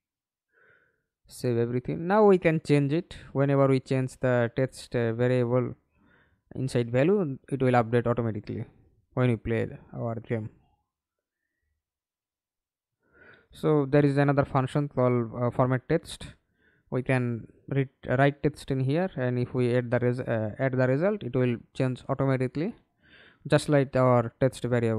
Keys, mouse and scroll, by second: 2.3 double click, 5.4 right click, 9.7 alt+click, 12.0 right click, 12.6-14.3 typing, 14.8 Return, 15.5-18.3 scroll up 1, 18.3-21.4 typing, 18.3 scroll, 22.4-23.0 typing, 24.4-24.9 typing.